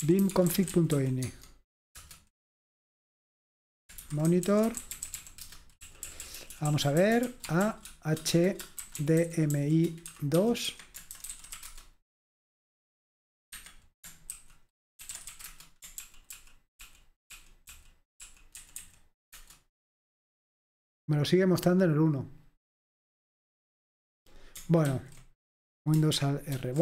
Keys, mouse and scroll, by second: 0.0-1.4 typing, 2.0 Return, 3.3-12.1 typing, 13.5 Escape, 14.3-15.7 typing, 16.0 ctrl+p, 16.4 ctrl+p, 16.8 ctrl+p, 17.4 ctrl+p, 18.6 ctrl+n, 18.8 ctrl+n, 19.4 Return, 25.0 ctrl+c, 26.5 alt+super+r.